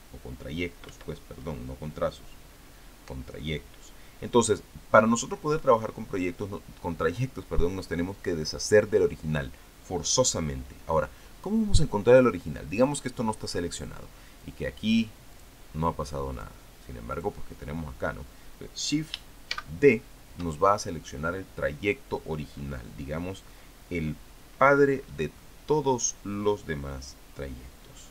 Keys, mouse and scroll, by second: 13.6 click, 15.2 click, 16.2 click, 17.2-17.7 drag, 17.8 click, 20.3 shift+d.